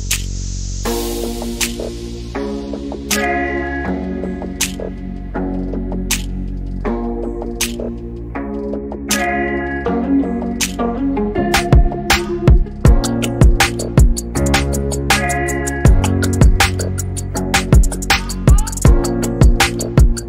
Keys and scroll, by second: 1.2-2.8 typing, 5.0-8.4 typing, 9.8-14.7 typing, 17.2-17.9 typing, 19.6 m.